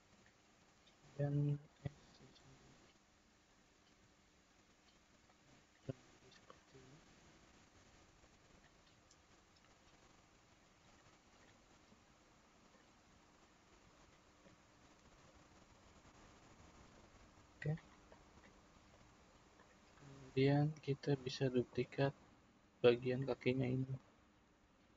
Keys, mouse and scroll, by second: 1.0-1.8 scroll down 1, 1.8 s, 5.8 click, 6.7-8.8 middle drag, 8.8-9.7 scroll up 2, 9.7 drag, 11.3-12.3 middle drag, 12.3 scroll down 2, 12.7-15.2 middle drag, 15.2 click, 16.4-18.9 middle drag, 18.9-21.8 drag, 23.2 click.